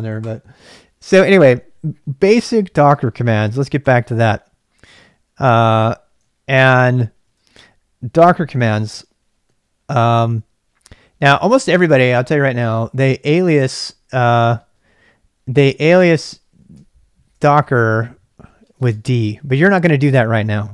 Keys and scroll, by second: 6.4 ctrl+b, 6.6 k, 7.3 ctrl+b, 7.5 k, 11.3 ctrl+c, 13.1-14.6 typing, 16.5-18.7 typing, 18.9 Return.